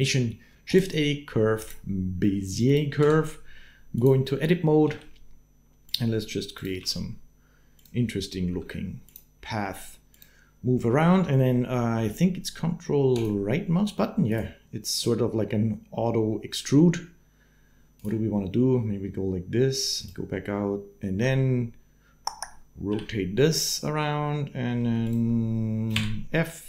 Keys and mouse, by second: 0.4 shift+a, 2.5 click, 3.1 Tab, 4.7 g, 6.4 middle click, 8.3 g, 8.3 s, 9.4 g, 13.0 ctrl+click, 14.1-15.6 ctrl+drag, 19.8 ctrl+click, 22.7 r, 24.8 shift+click, 25.7 f.